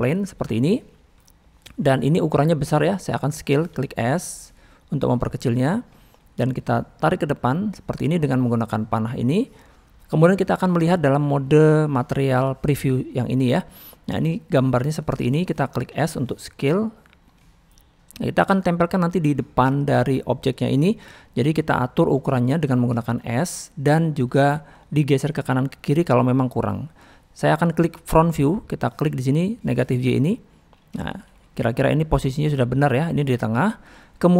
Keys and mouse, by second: 0.6-1.0 middle drag, 2.5 middle click, 5.9 middle drag, 6.7-7.5 drag, 9.9-10.3 middle drag, 11.9 click, 13.5 middle click, 14.6-15.1 middle drag, 17.4-17.7 middle drag, 18.4-19.1 drag, 19.3-19.7 middle drag, 20.6 click, 20.8 middle click, 22.3-22.7 middle drag, 23.0 shift+middle click, 23.4 click, 26.8 middle click, 28.8 middle click, 30.2 click, 31.0 shift+middle drag.